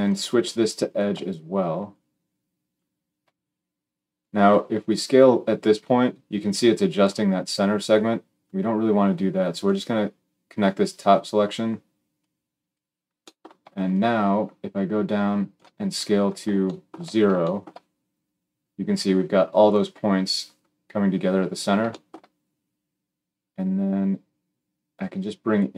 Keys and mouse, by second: 22.7-25.7 drag.